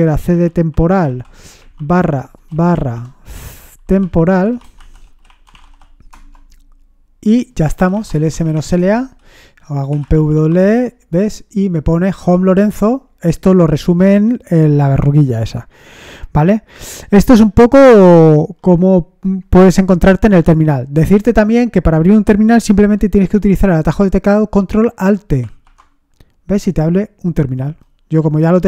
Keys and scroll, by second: 0.0-6.1 typing, 7.6-10.8 typing, 12.7-13.4 typing, 25.4 ctrl+alt+t.